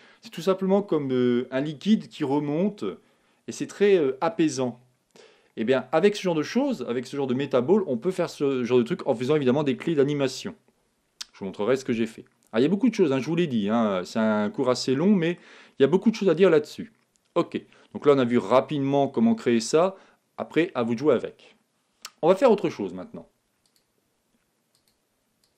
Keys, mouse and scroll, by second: 13.3-15.1 middle drag, 18.9-20.7 middle drag, 23.6-25.5 drag.